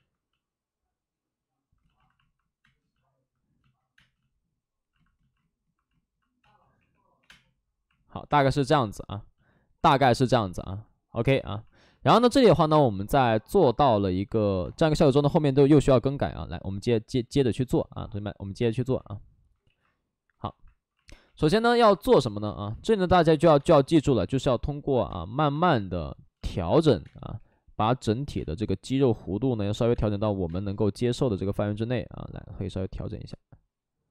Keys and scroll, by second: 2.6 space, 3.9 space, 6.3 space, 6.7 3, 7.2 space, 7.2 3, 14.6 space, 15.5 space, 18.7 ctrl+z, 19.5 ctrl+z, 22.4 ctrl+z, 22.4 space, 23.5 space, 25.0 space, 25.5 space, 27.0 space, 27.3 3, 28.3 space.